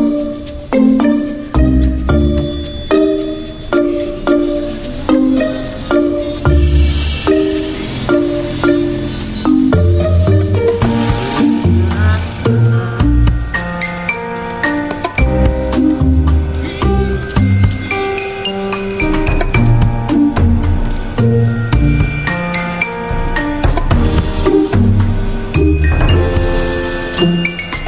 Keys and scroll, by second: 6.2 typing.